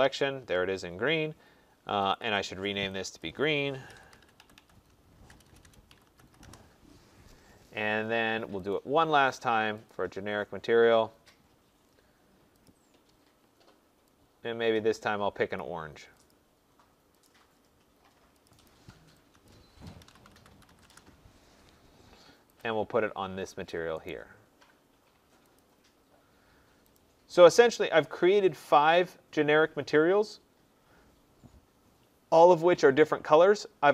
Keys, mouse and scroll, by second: 2.1 click, 2.3 click, 3.2 click, 3.6-6.7 typing, 9.0 typing, 11.4 typing, 12.4 click, 12.7 click, 15.5 click, 16.3 click, 17.2 click, 18.4 click, 18.6 click, 19.4 click, 19.7-21.1 typing, 22.7 click, 24.0 right click, 25.6-26.3 typing, 25.8 click, 27.1 click.